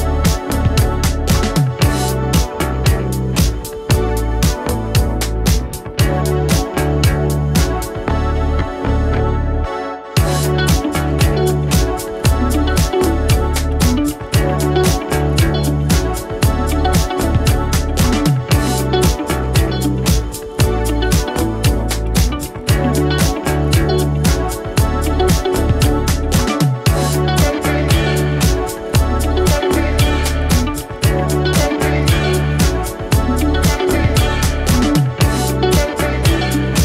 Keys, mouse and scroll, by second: 9.4 click, 14.2-15.2 drag, 17.7 right click, 18.3 click, 20.9 right click, 21.0 click, 21.5 right click, 21.9 click, 22.3 right click, 22.7 click, 24.1 right click, 24.5-29.3 drag, 31.4-32.3 typing.